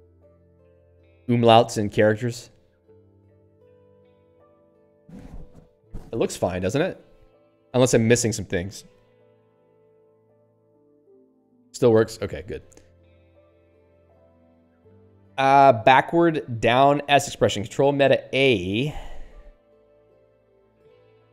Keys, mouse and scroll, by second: 9.1 typing, 11.9 click, 18.0 ctrl+alt+a.